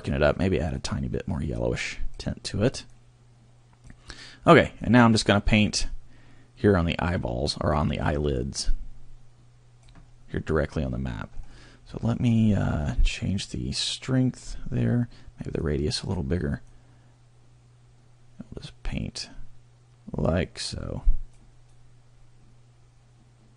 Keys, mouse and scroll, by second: 0.7 click, 2.8 click, 5.2 click, 11.3-12.4 scroll up 1, 12.4-13.8 scroll down 1, 13.8 click, 15.6 click, 16.7 click, 21.8 click.